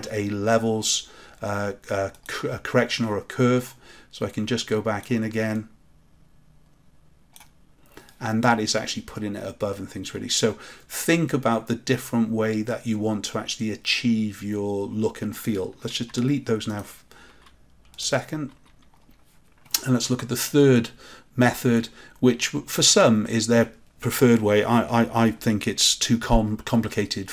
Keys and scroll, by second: 16.0 Delete.